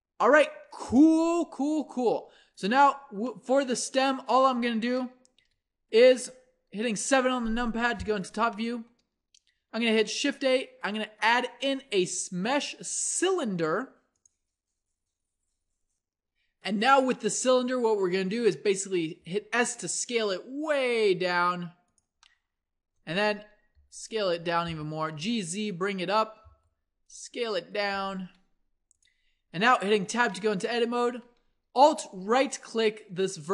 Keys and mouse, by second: 1.1-5.4 middle drag, 5.4 KP_1, 6.7 KP_7, 7.6 a, 8.1 click, 10.1 shift+a, 18.1-19.2 drag, 19.2 s, 23.7 s, 24.7 g, 26.5 s, 27.9 g, 29.9 Tab, 31.1 a.